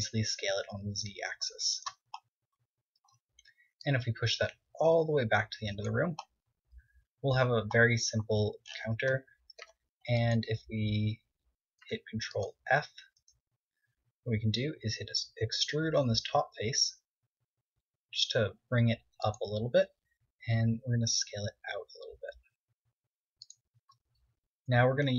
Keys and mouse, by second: 0.4 s, 2.4-3.6 drag, 3.8 Tab, 4.4-6.2 drag, 6.9-7.6 middle drag, 9.7 Tab, 12.4 ctrl+Tab, 12.9 middle click, 14.2 KP_1, 15.3 e, 19.8-21.8 drag, 20.7 s, 24.0-25.1 drag.